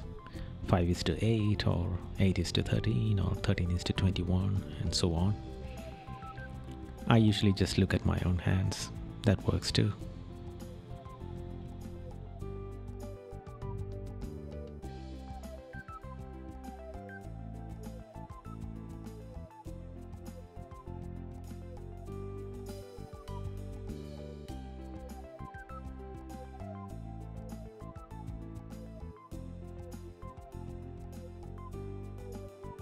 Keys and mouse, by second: 3.4 right click, 20.8 right click, 23.7 right click, 24.2 right click, 24.9 right click, 25.7 right click, 28.5 right click, 30.9 right click.